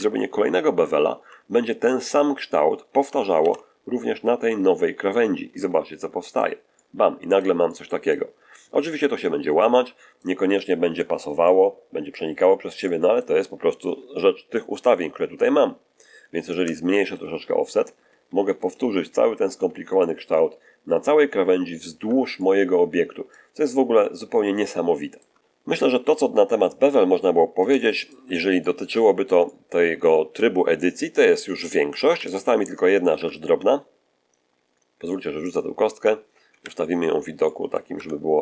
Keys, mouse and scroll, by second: 3.3 ctrl+b, 6.1 click, 6.7 middle click, 7.6 middle click, 8.8-10.3 middle drag, 10.7-11.1 scroll up 2, 11.3 middle click, 12.3 scroll down 2, 12.7 shift+middle click, 16.4-20.4 shift+drag, 20.7-21.9 shift+scroll down 3, 21.9 Tab, 22.3-23.4 middle drag, 23.5-24.3 scroll up 2, 24.5-25.3 shift+middle drag, 26.6-27.8 middle drag, 27.9-29.5 shift+middle drag, 32.0 x, 32.2 click, 33.0 shift+a, 35.4 click, 36.4 1, 37.3-37.8 middle drag, 37.9 Tab.